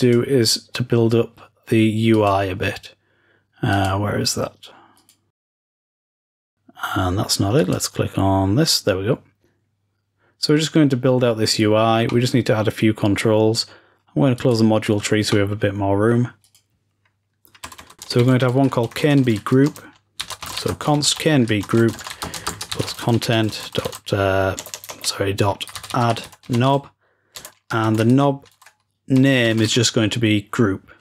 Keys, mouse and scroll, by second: 2.2-3.1 drag, 3.8 click, 5.0-5.9 drag, 6.1-7.2 drag, 7.7-10.1 drag, 12.0-14.3 middle drag, 14.5 click, 15.2-16.4 middle drag, 16.4 click.